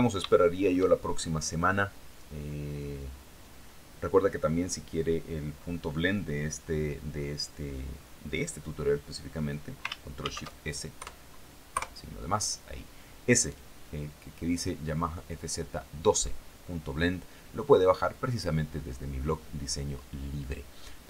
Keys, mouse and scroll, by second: 0.4 shift+scroll down 3, 1.0-1.5 scroll up 2, 2.1-2.5 scroll down 2, 9.6 ctrl+shift+s, 10.4 KP_Add, 11.2 KP_Enter.